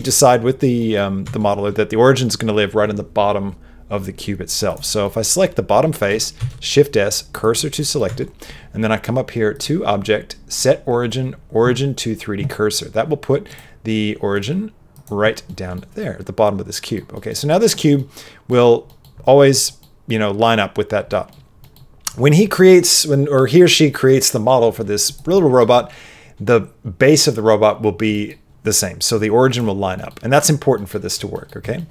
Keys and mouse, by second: 0.0 middle click, 0.7 middle click, 1.2 Tab, 5.0 middle click, 6.3 shift+s, 7.7 middle click, 8.0 Tab, 9.6-13.4 drag, 13.5-15.0 drag, 15.5 middle click, 15.9 middle click, 17.1 middle click, 17.4 middle click, 17.9 middle click, 18.8 middle click, 19.6 middle click, 21.1 middle click, 21.6 middle click, 25.0 click, 25.3 middle click, 28.1 middle click, 29.9 middle click, 30.7 middle click, 31.3 middle click, 31.7 shift+middle click.